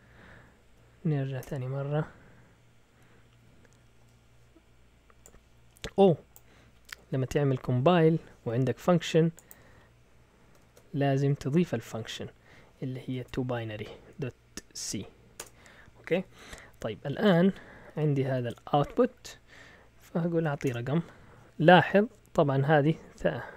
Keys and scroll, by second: 0.3 Up, 0.5 Up, 0.6 Up, 1.4 Return, 10.6 ctrl+l, 11.1 Up, 12.8-14.8 typing, 15.4 Return, 16.7-18.7 typing, 20.4 typing.